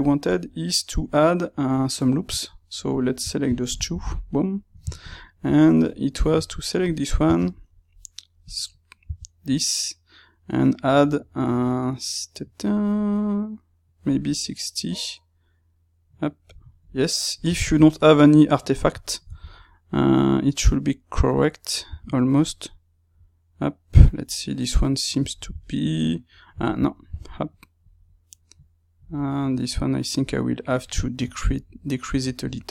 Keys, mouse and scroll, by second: 0.3-2.9 drag, 3.8 KP_Divide, 4.2-5.7 middle drag, 5.7 click, 6.8 click, 8.4 space, 17.4-32.7 ctrl+middle drag.